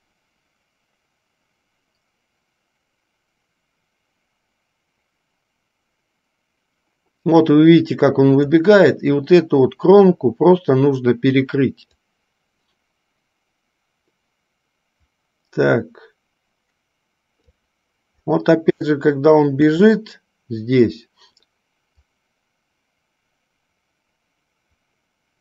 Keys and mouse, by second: 12.3-17.8 drag, 19.1-19.9 shift+middle drag, 22.4-25.4 drag.